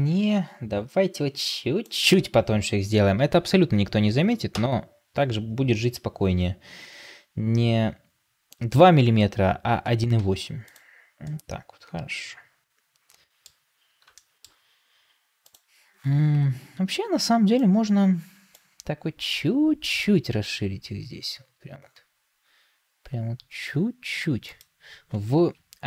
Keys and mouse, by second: 1.7-6.2 drag, 10.1 ctrl+space, 11.1-13.4 middle drag, 14.1 shift+middle drag, 16.2 Tab, 18.4 click, 20.2 alt+s.